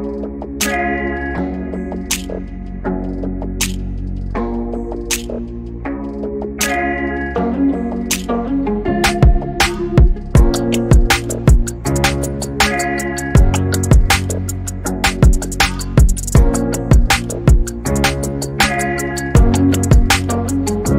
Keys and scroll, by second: 1.6 m, 6.1-9.6 typing, 11.1 m, 12.3-13.8 typing, 16.3 m, 20.0 typing.